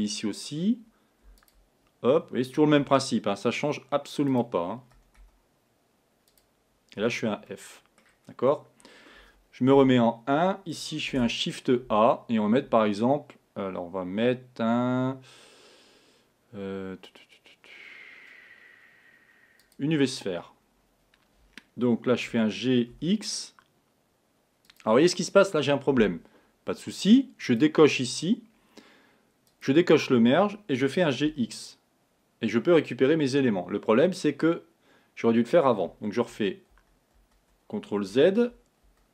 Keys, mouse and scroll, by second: 1.4 click, 2.7 e, 5.0 e, 7.1 f, 7.5-9.8 middle drag, 9.8 KP_1, 11.2 shift+a, 20.2-20.5 scroll down 2, 22.5 g, 27.5 click, 29.6 click, 30.8 g, 39.0 z.